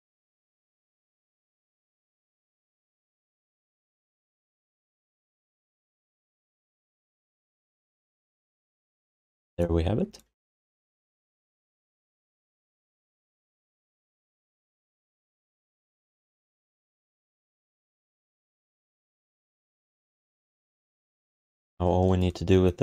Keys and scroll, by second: 1.7 q, 4.2 alt+shift+d, 4.5 ctrl+s, 6.6 q, 7.5 alt+shift+d, 7.8 ctrl+s, 12.3 ctrl+s, 14.3 q.